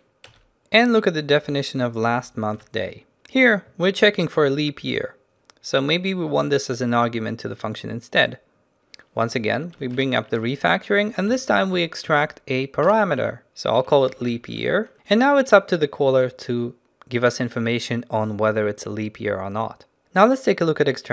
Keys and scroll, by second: 2.7 ctrl+b, 10.0 ctrl+alt+shift+t.